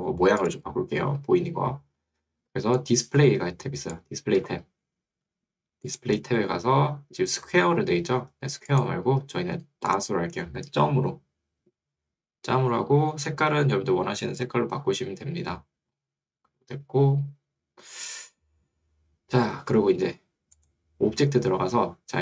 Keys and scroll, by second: 5.3 Escape.